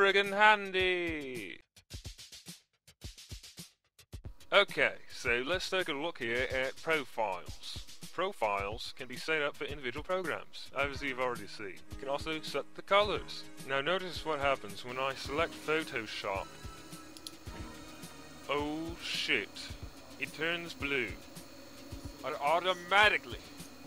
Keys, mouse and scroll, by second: 4.2 Insert, 4.2 click, 20.1 click, 22.1 click.